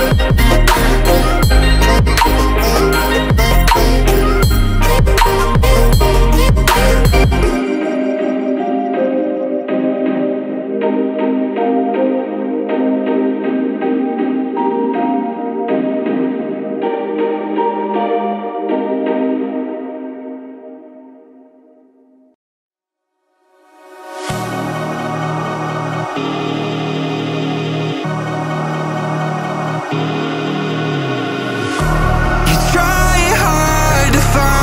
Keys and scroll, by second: 29.8 Return, 31.3 ctrl+t.